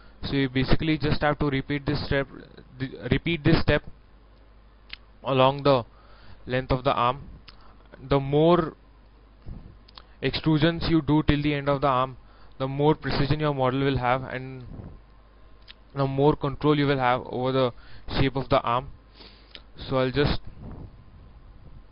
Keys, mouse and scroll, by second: 3.6 shift+middle click, 7.0-7.4 scroll up 1, 7.5 shift+middle click, 9.2-11.6 drag, 11.7 scroll down 1, 12.2 shift+middle click, 13.8 scroll up 1, 14.5 scroll down 1, 14.9 middle click, 16.2 KP_1, 16.8 scroll up 1, 18.0 e, 18.3-21.9 drag, 20.2 s, 21.2 s.